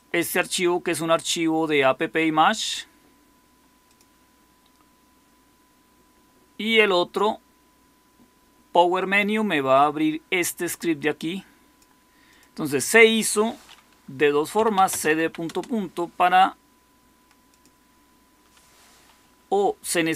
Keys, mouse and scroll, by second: 14.2-15.6 typing.